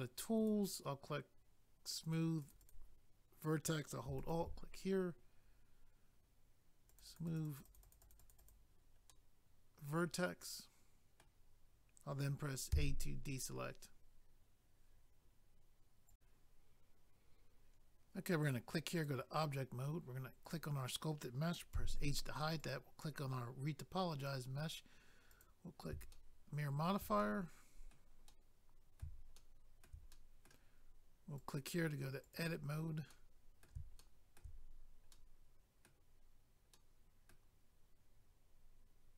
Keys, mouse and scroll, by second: 0.4 click, 0.5 click, 2.0 click, 2.1 click, 2.4 click, 2.5 click, 2.6 click, 2.7 double click, 4.2 alt+click, 4.3 alt+click, 6.9 click, 7.0 click, 7.0 click, 7.2 click, 7.2 click, 7.4 double click, 7.4 click, 7.6 click, 7.7 double click, 7.8 click, 7.9 click, 8.0 click, 8.1 double click, 9.1 middle click, 12.7 a, 16.1 click, 16.1 click, 18.4 click, 18.5 click, 19.0 click, 19.1 click, 19.5 scroll down 1, 20.5 click, 20.5 click, 21.7 h, 22.6 click, 22.7 click, 25.3 click, 25.4 click, 26.1 shift+middle click, 27.2 middle click, 28.3 middle click, 29.3 shift+middle click, 30.1 middle click, 31.4 click, 31.5 click, 32.2 click, 32.3 click, 33.1 middle click, 34.0 shift+middle click, 34.6 scroll up 1, 35.1 middle click, 36.7 middle click.